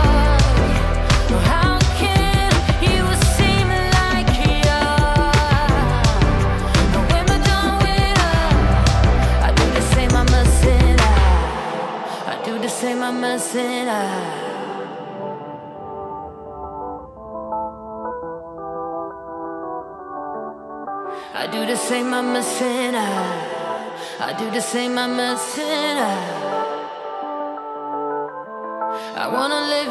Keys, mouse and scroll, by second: 0.0-0.2 typing, 15.0 space, 16.2 click, 18.3 Left, 18.5 Left, 19.2 shift+Left, 19.9 shift+Left, 20.2 space, 20.8 space, 25.1-26.2 typing, 25.6 click.